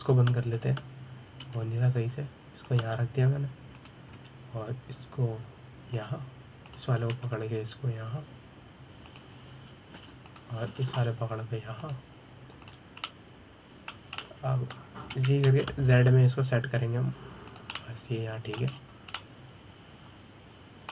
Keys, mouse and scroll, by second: 2.2 click, 3.1 g, 5.4 click, 5.8 g, 8.3 click, 8.8 g, 12.0 click, 12.4 g, 14.3 click, 14.8-16.8 middle drag, 16.8 g, 19.4-20.4 middle drag, 20.4-20.8 scroll up 2, 20.8-20.9 middle drag.